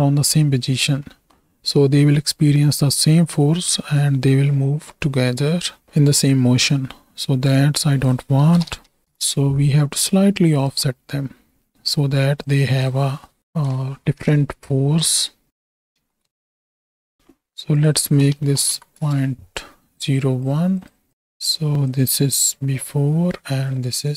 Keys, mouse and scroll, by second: 1.1 middle click, 7.7-9.1 drag, 10.5 drag, 12.4-14.2 drag, 15.5 click, 17.1 middle click, 17.7-19.0 drag, 18.4 KP_0, 20.0 click, 21.1 click, 21.9 click, 22.6 m.